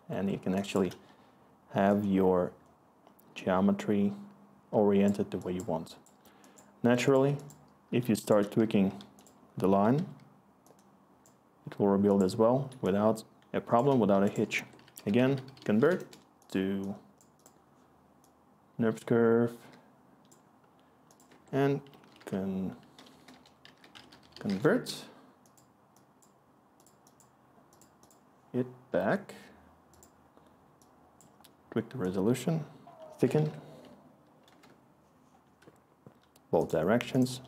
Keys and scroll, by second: 0.0-1.3 scroll, 8.0 s, 9.9 t, 14.6 Tab, 14.6-16.0 typing, 16.0 Return, 21.3 Tab, 21.7-24.7 typing, 32.8 Tab, 33.0-33.9 typing, 34.5 Return.